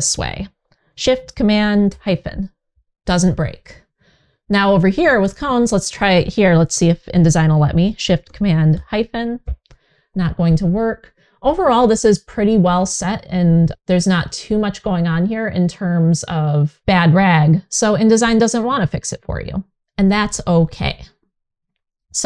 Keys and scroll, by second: 1.5 shift+super+-, 8.4 shift+super+-, 15.0 Return.